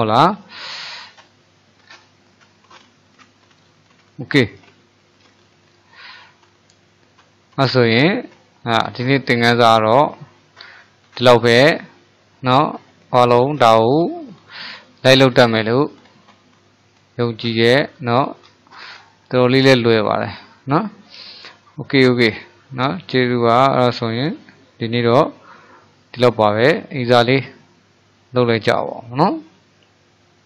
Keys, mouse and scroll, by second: 1.0-2.0 middle drag, 2.0-2.7 scroll down 5, 2.7-3.7 middle drag, 3.7 click, 4.4-4.9 scroll up 1, 4.9-8.8 shift+middle drag, 8.8-9.3 scroll up 1, 9.3-16.9 shift+middle drag, 17.7-18.1 scroll up 1, 18.1-22.4 shift+middle drag, 22.4-22.8 scroll down 1, 22.8-25.8 middle drag, 27.1-30.3 middle drag.